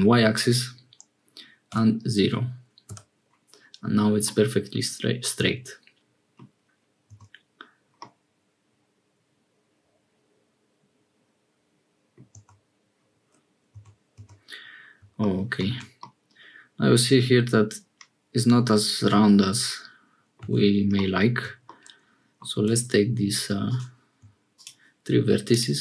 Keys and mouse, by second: 4.2-6.4 middle drag, 7.1 Tab, 7.9-12.2 middle drag, 12.3 Tab, 13.7 Tab, 15.6 Tab, 16.0-20.4 drag, 20.5 Tab, 21.7 click, 22.6 1.